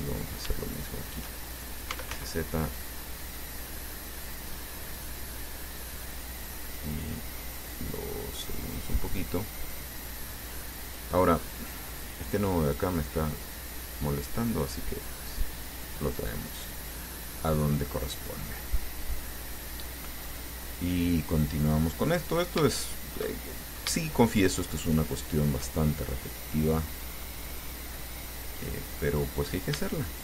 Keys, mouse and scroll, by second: 0.3 right click, 0.9 shift+right click, 1.8-2.8 typing, 6.6 click, 7.5-9.4 drag, 9.5-11.0 middle drag, 11.9 click, 12.8 right click, 13.6-16.3 drag, 16.4-18.7 middle drag, 19.4-20.7 middle drag, 21.8 click, 22.4 right click, 23.2 shift+right click, 23.5 shift+middle click, 24.3 shift+right click, 25.1 shift+right click, 25.5 shift+right click, 26.1-27.6 shift+middle drag, 28.8 click, 29.4 scroll up 2.